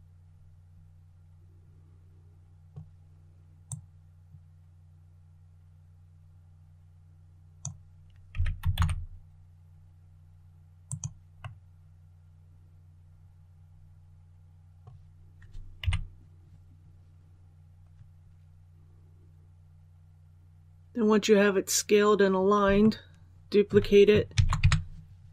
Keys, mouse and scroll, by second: 3.5-7.7 drag, 8.2 s, 8.6 shift+z, 10.7 click, 11.3-14.1 middle drag, 14.1-14.6 scroll up 1, 15.7 KP_1, 21.5-22.1 scroll down 1, 22.7 shift+middle click, 24.2 shift+d.